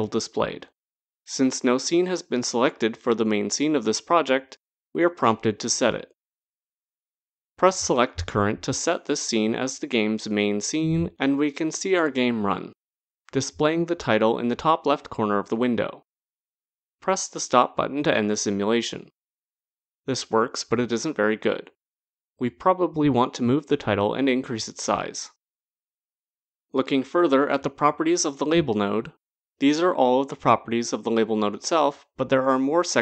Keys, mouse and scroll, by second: 8.4 click, 17.3 click, 27.9 click.